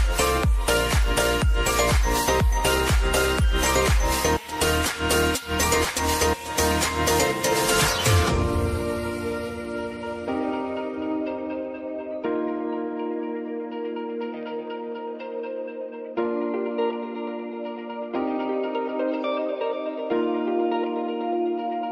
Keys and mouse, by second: 16.0 space, 17.6-21.9 drag.